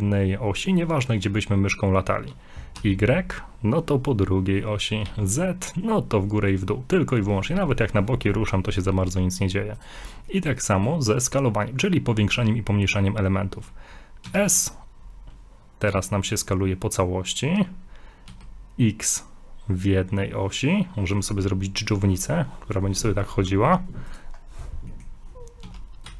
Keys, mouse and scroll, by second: 10.3 middle click, 10.5 middle click, 10.6 scroll down 2, 11.0 shift+middle click, 13.1-13.5 scroll up 1, 14.3 s, 24.4 scroll down 2, 24.9 middle click, 25.6 s.